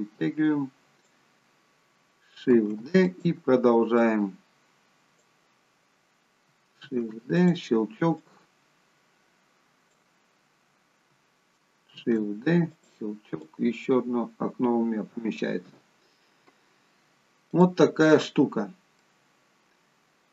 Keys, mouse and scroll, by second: 2.4 shift+d, 3.9 click, 6.7 shift+d, 8.2 click, 11.9 shift+d, 13.4 click, 17.5 click, 19.3 middle click.